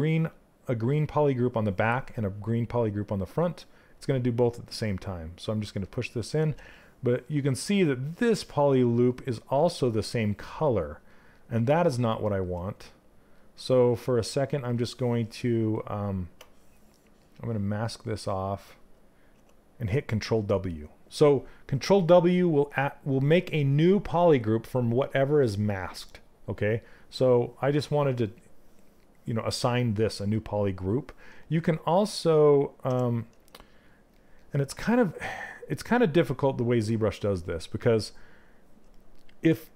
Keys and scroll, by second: 6.0 ctrl+z, 34.2 q.